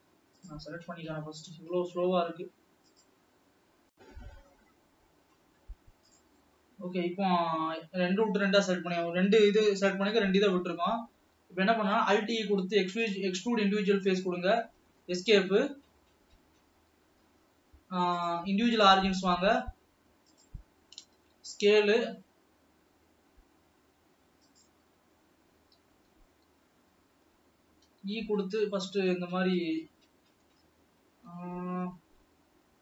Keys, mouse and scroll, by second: 6.8-7.1 scroll up 2, 7.9 scroll down 1, 12.0 alt+e, 15.5 s, 18.3-21.5 drag, 21.5 s, 25.9 ctrl+z, 28.0 e, 31.8 ctrl+z.